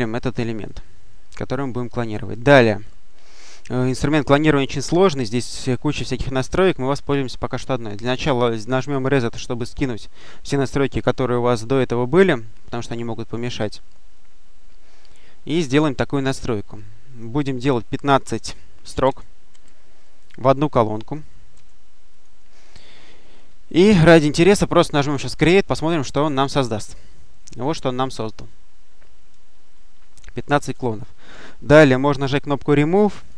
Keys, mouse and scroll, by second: 0.5-1.4 drag, 9.4 click, 16.6 click, 18.9 1, 19.3 5, 20.4 click, 21.4 1, 22.0 click, 23.6-25.2 drag, 25.8 click, 26.8-28.6 scroll down 1, 28.6-30.0 scroll up 1, 30.0-30.8 scroll up 1, 33.0 click.